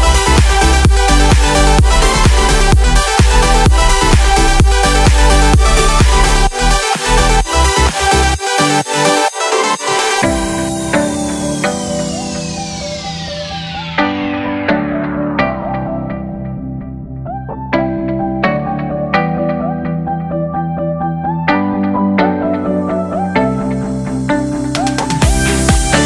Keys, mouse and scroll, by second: 2.9-6.5 drag, 7.2 click, 8.4-9.6 middle drag, 15.3-16.3 drag, 17.8-19.7 drag, 21.9 click, 22.6 click, 23.8 click, 25.8 ctrl+l.